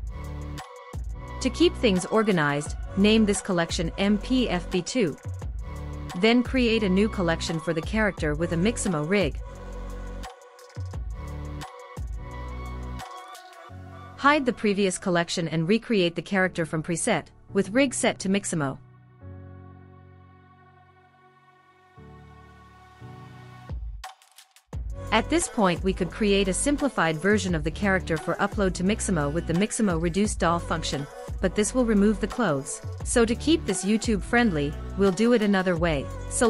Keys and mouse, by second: 3.5-6.0 drag, 9.3 click, 10.8 click, 11.0-12.8 drag, 14.2 click, 15.7 click, 17.0 click, 18.7-20.4 drag, 23.0 click, 27.8 click, 29.8 click, 30.8 click, 36.3 click.